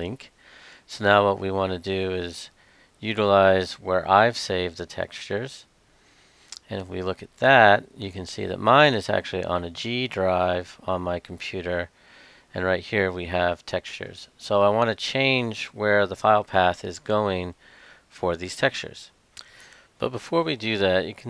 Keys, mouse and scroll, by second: 0.1-21.2 drag.